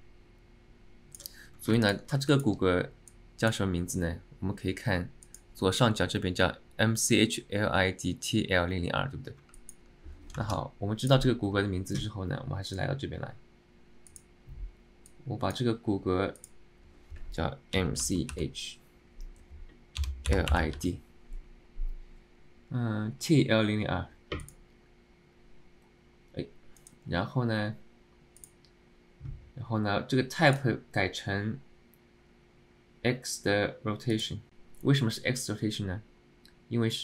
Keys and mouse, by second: 1.8 alt+middle click, 2.4 alt+middle click, 3.3 click, 5.5 click, 9.7 alt+middle click, 10.5 ctrl+Tab.